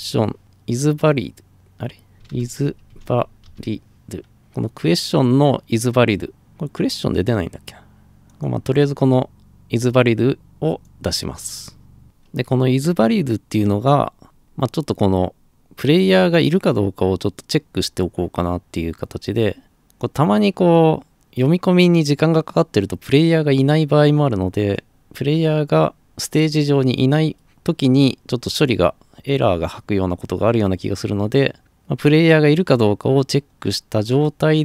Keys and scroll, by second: 1.9-4.0 typing.